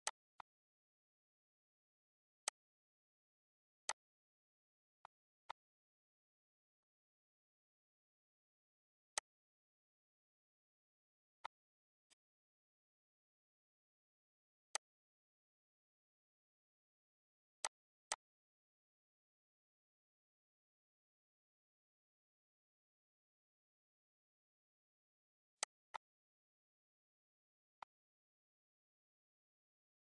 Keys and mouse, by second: 0.0 click, 2.4 click, 3.8 click, 4.9 click, 6.7 click, 9.1 click, 11.4 click, 12.1 click, 14.7 click, 17.5 click, 25.5 click, 27.8 click.